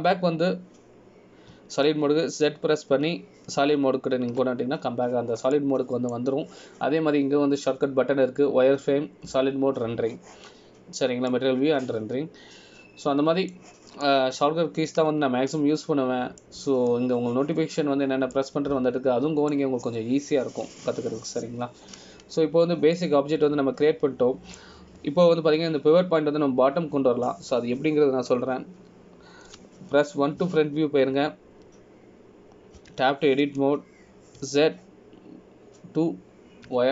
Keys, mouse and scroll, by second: 0.9 scroll down 2, 3.7 z, 7.7 middle click, 8.3-9.3 scroll up 1, 13.5 middle click, 16.2 middle click, 20.5 middle click, 24.5-25.1 scroll up 1, 25.1 middle click, 31.7 KP_1, 35.0 Tab, 36.6 z.